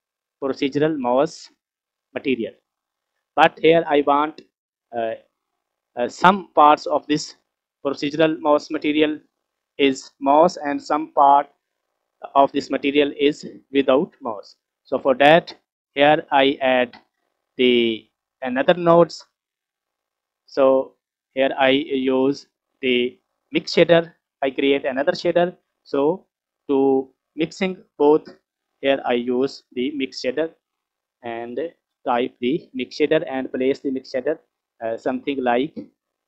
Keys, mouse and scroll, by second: 2.5-3.1 scroll down 5, 3.2-4.1 middle drag, 16.0 scroll down 4, 16.3-16.7 middle drag, 16.9-17.4 scroll up 4, 17.4 middle click, 18.1 scroll up 2, 20.4-20.9 scroll down 1, 21.4 click, 21.8-22.2 scroll up 3, 22.2 middle click, 29.2 click, 30.4 shift+a.